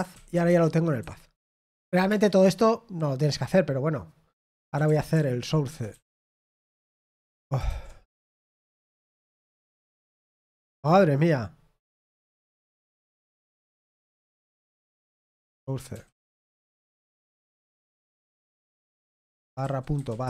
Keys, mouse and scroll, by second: 0.6-2.4 typing, 1.0 Escape, 7.3-8.1 typing, 10.7 ctrl+c, 18.9-20.2 typing.